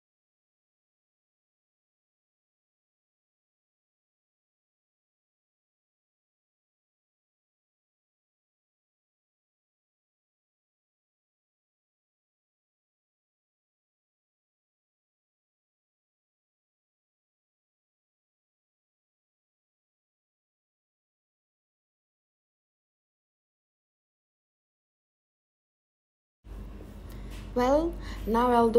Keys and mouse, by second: 0.9-2.2 drag, 4.3 click, 4.8 super+z, 14.6 click, 16.0 click, 20.1-21.1 middle drag, 23.1 click, 23.1 right click, 26.5 e.